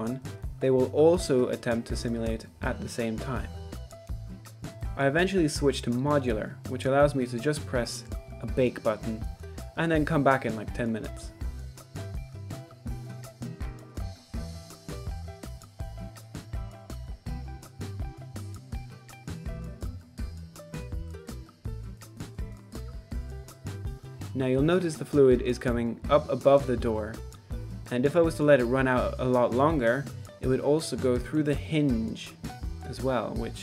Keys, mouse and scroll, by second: 0.0 shift+middle click, 0.2 ctrl+s, 1.6 click, 12.6 click, 12.6 Escape, 12.8 space, 13.0 click, 13.3-14.0 shift+middle drag, 14.1 click, 14.4 middle click, 14.5 click, 14.9 click, 15.4 middle click, 15.8 KP_0, 16.1 middle click, 17.4 middle click, 17.6 KP_0, 20.9-21.2 middle drag, 21.4 z, 21.8-22.1 drag, 22.2 middle click, 22.3 z, 22.4 middle click, 22.8-23.5 drag, 23.6 middle click, 23.9-24.6 drag, 24.7 middle drag, 25.0-25.6 drag, 25.7-26.3 middle drag, 26.3 middle click, 26.6-27.6 drag, 29.8 middle click, 30.2 shift+middle click, 30.5 Tab, 30.7 middle click, 30.9 ctrl+r, 31.8 middle click, 32.1 middle click, 32.4 shift+middle click, 33.5 ctrl+r.